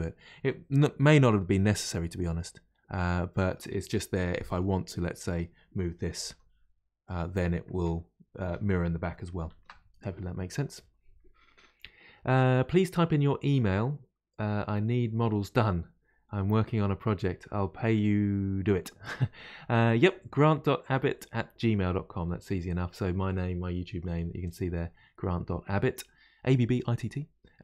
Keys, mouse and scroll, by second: 1.9-5.2 middle drag, 5.2 click, 6.1 g, 9.5 ctrl+z.